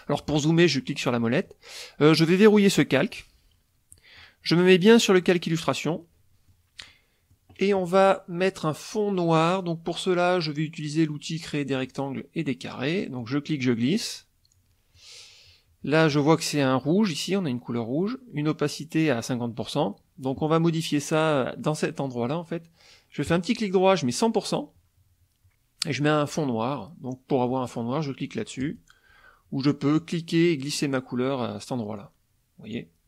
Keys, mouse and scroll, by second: 0.2 middle click, 3.1 click, 3.9 middle click, 5.0 click, 5.7 middle click, 6.9 middle click, 11.8 click, 13.2-15.2 drag, 23.3 right click, 24.1 click, 28.6 click, 30.0-31.4 drag, 32.0 click.